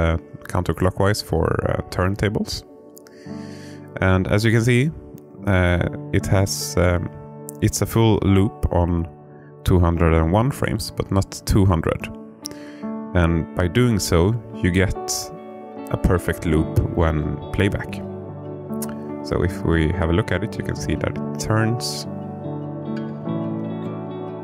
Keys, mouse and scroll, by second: 11.2 i, 14.4-21.7 drag, 22.6 space.